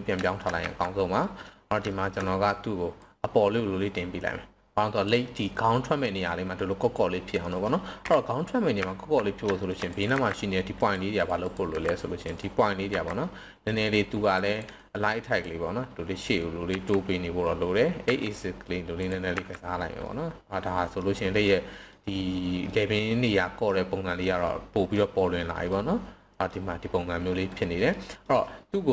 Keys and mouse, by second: 0.2 shift+middle click, 0.6 z, 1.2 middle click, 1.9 shift+middle drag, 3.0-5.0 drag, 5.2-5.9 middle drag, 7.1-7.5 middle drag, 7.8 KP_7, 8.8 z, 9.5 shift+middle click, 10.1 c, 11.7 c, 12.3 right click, 12.8 c, 14.3 drag, 14.7 right click, 15.4-16.2 drag, 16.7 s, 17.9 x, 19.0 drag, 19.3 z, 20.0-21.0 middle drag, 21.5-21.9 middle drag, 22.7-23.7 middle drag, 24.4-24.9 middle drag, 25.7-26.5 middle drag, 27.9 middle drag.